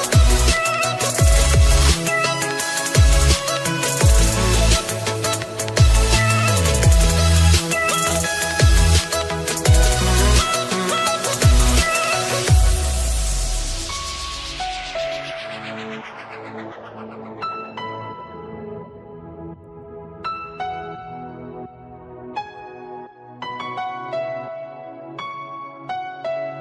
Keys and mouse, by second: 0.3 click, 0.9 click, 1.7 click, 3.7 click, 3.7 KP_2, 4.4 Return, 4.4 click, 4.4 KP_5, 4.4 KP_2, 6.1 shift+Page_Down, 6.3 shift+Page_Down, 6.3 Return, 6.3 click, 6.3 KP_5, 6.3 KP_2, 7.7 shift+Page_Down, 7.7 Return, 7.7 click, 7.7-9.0 typing, 9.1 Return, 10.4 Return, 10.4 click, 10.4 typing, 10.5 Return, 10.5 click, 11.8 shift+Page_Down, 11.8 KP_0, 11.8 KP_2, 11.8 KP_1, 14.0 shift+Page_Down, 14.0 Return, 14.0 KP_0, 14.0 KP_2, 15.4 Return, 15.4 shift+Page_Down, 15.4 click, 15.4 KP_0, 15.6 space, 18.0 click, 18.4 click, 21.6 click, 24.4 space, 25.6 click, 26.4 click.